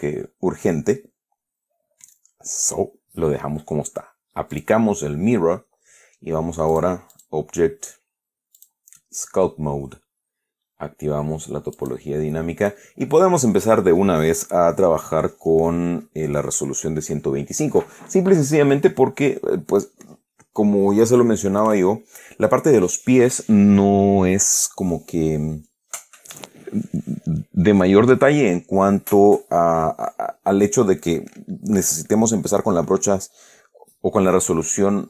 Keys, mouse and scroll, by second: 4.8 click, 7.0 click, 7.4 click, 8.9 click, 12.1 click.